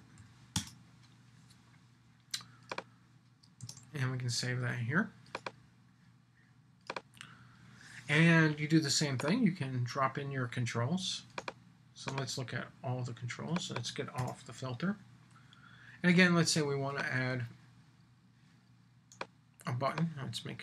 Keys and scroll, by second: 0.5 Return, 3.6 super+s.